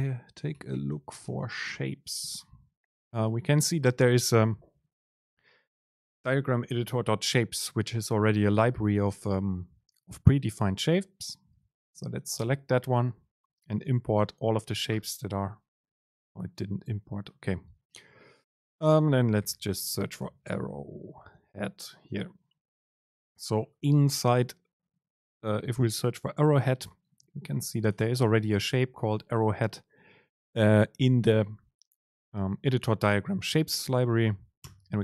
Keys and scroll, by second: 19.5 ctrl+r.